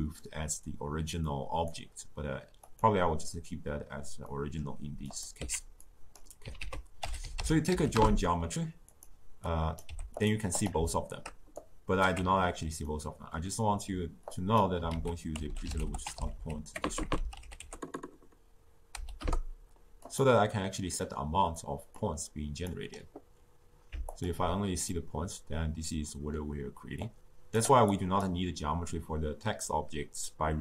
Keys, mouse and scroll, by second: 1.2-2.7 drag, 4.2-5.0 middle drag, 5.0 click, 5.3 x, 5.8 click, 6.5 ctrl+a, 9.4 click, 9.8 g, 10.5 click, 11.5-12.8 alt+right drag, 12.8-14.3 middle drag, 14.3 click, 14.9 ctrl+a, 16.8 BackSpace, 17.0 BackSpace, 21.9-24.2 drag, 24.9-26.9 middle drag, 26.9-30.6 drag.